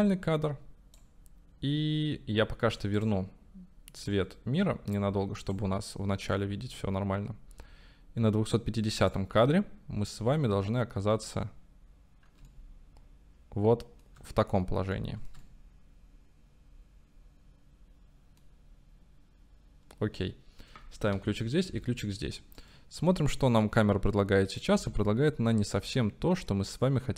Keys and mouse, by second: 3.0 click, 6.3-9.3 right drag, 9.7-11.2 drag, 12.5-14.2 shift+middle drag, 15.0 shift+middle click, 15.5-18.5 middle drag, 21.2 i, 21.8 i, 22.7-24.7 drag, 24.9 space.